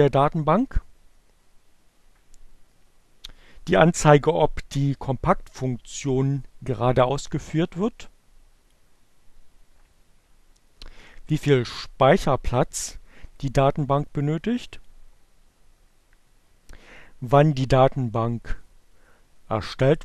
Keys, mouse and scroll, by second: 6.4-8.0 drag, 11.8-14.2 drag, 18.0-19.2 drag.